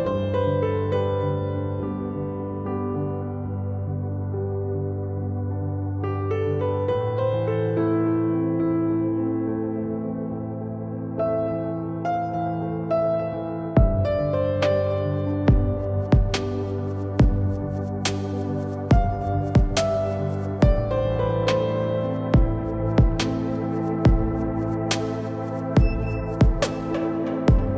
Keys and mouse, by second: 8.0-11.9 drag, 11.9 z, 12.2-13.4 drag, 13.4 s, 15.5-16.1 drag, 25.6-27.5 drag, 27.5 KP_0.